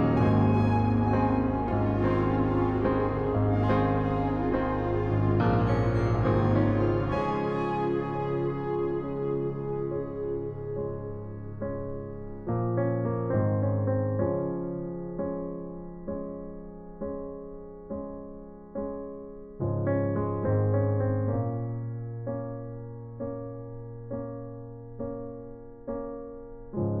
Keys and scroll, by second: 4.0 ctrl+t, 14.4 Up, 14.4 Up, 15.5 alt+shift+Return.